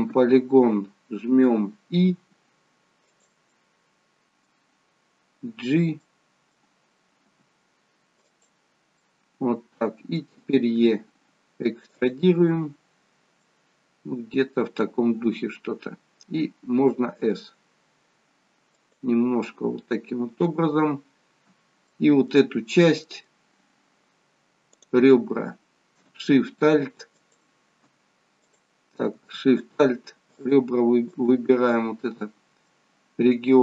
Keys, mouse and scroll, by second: 2.1 i, 3.5 middle click, 6.2 middle click, 7.2 g, 9.1 middle click, 10.8 e, 13.4 middle click, 17.1 s, 19.5 middle click, 24.8 middle click, 24.8 click, 27.2 alt+shift+click, 28.6 click, 29.6 alt+shift+click, 30.3 alt+shift+click, 32.7 middle click.